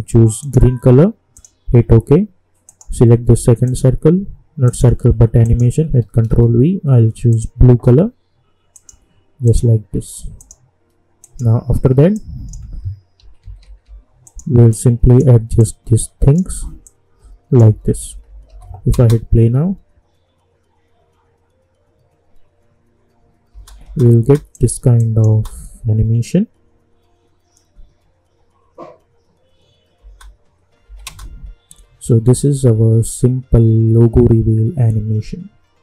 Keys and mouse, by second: 6.2 ctrl+v, 7.3 click, 13.2 =, 13.4 =, 13.6 =, 13.8 =, 14.2-17.6 drag, 17.6-18.9 typing, 23.5 space, 24.5 click, 25.3 space, 30.0 space, 30.8 n, 31.0 space.